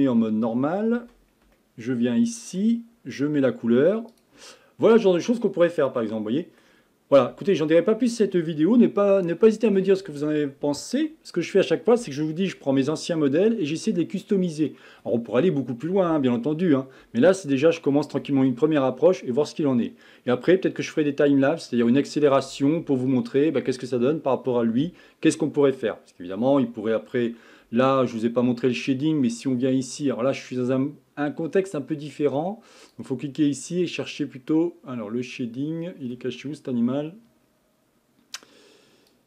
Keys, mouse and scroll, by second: 0.0 KP_1, 1.6-4.1 shift+middle drag, 4.1 click, 5.2-7.3 middle drag, 7.3 KP_1, 8.1-8.8 scroll down 2, 8.8 scroll up 2, 9.3-12.4 shift+middle drag, 28.1 click, 32.8 click, 39.1 click.